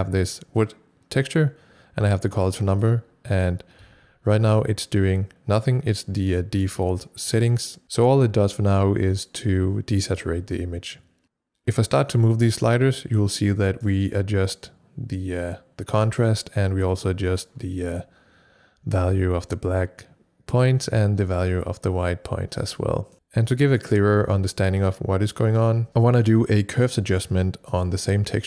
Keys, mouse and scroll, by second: 2.6 click, 3.8 c, 12.6 click, 12.7-23.1 drag, 12.7 c, 14.9 c, 22.9-23.6 typing, 23.1 click, 25.4 click, 25.7 typing, 25.9 Return, 27.6 typing, 27.7 click.